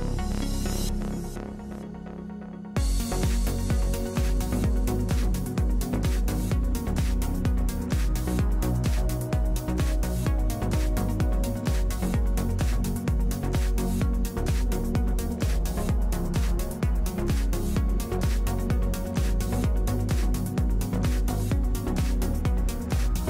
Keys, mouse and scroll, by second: 0.3 ctrl+Tab, 3.9 a, 8.1 c, 10.4 alt+e, 11.7 alt+w, 14.6-17.0 drag, 17.2 Tab, 18.3 Tab, 18.8 Tab, 20.5 ctrl+3, 21.5 w.